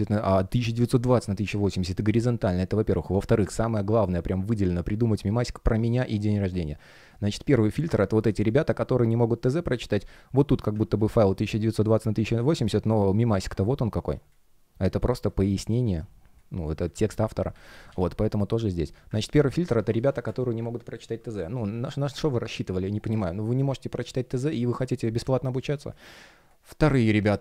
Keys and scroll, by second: 12.4 shift+3, 17.0 super+z, 19.6 space, 21.0 space, 25.6 space.